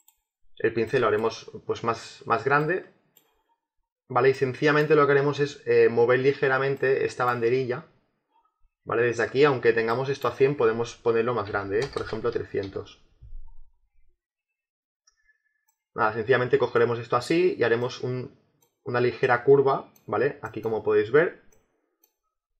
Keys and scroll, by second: 11.4 3, 12.6 Return.